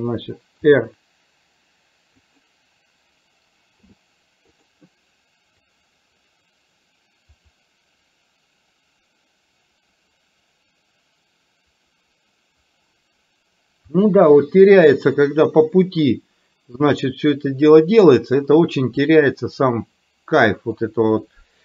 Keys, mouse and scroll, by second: 0.7 r, 3.8 i, 5.7-20.8 drag.